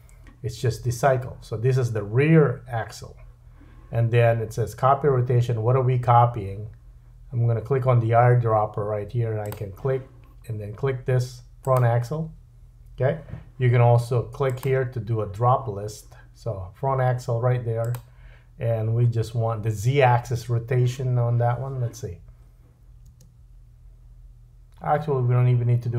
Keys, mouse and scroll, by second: 9.5-14.4 drag, 17.9-23.8 drag, 23.1 space, 23.8-25.9 right drag.